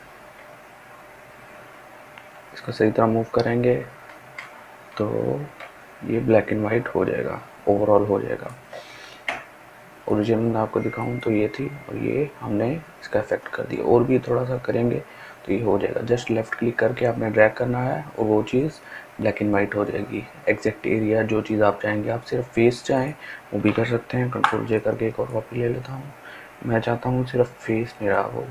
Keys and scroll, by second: 25.5 ctrl+j.